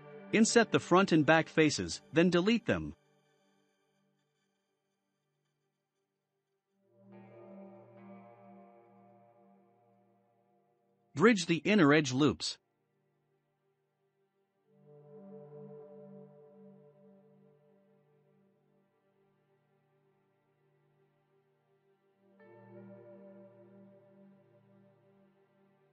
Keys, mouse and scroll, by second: 1.0 shift+click, 1.5 click, 1.9-3.8 shift+middle drag, 7.9 x, 10.2 2, 10.7 click, 10.9 click, 11.7 shift+click, 11.9 shift+click, 12.8-17.4 right drag, 17.4-18.1 scroll down 2, 18.1 click, 18.8 Tab, 19.1 click, 19.6-20.3 scroll down 1, 20.3-22.7 drag, 20.3 scroll down 4, 22.7-24.2 shift+middle drag, 24.2-25.3 scroll up 3, 24.5-25.3 middle drag, 25.3 click.